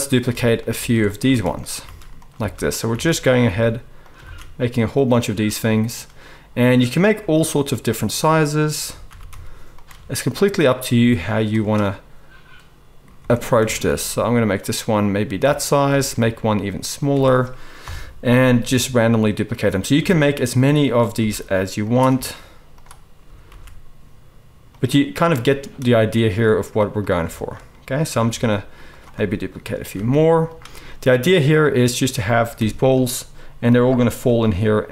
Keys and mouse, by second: 0.0-4.3 typing, 0.9-7.8 shift+middle drag, 7.8 click, 7.9-8.4 middle drag, 8.4 shift+click, 8.5-13.3 shift+middle drag, 9.0 shift+d, 9.9 Tab, 10.9 s, 13.1 Tab, 13.3 click, 13.4-15.7 middle drag, 13.5 Tab, 13.8 s, 15.4 Tab, 15.7 click, 15.8 Tab, 15.8-20.8 middle drag, 16.2 s, 17.1 Tab, 17.8 KP_7, 18.7 shift+d, 20.1 shift+d, 20.8 click, 21.1-27.0 middle drag, 21.1 s, 22.1 ctrl+a, 23.4 shift+d, 27.0 drag, 27.2 shift+middle click, 27.3 shift+click, 27.4-30.8 shift+middle drag, 28.3 shift+d, 30.1 shift+d, 32.5 KP_7, 34.2 g.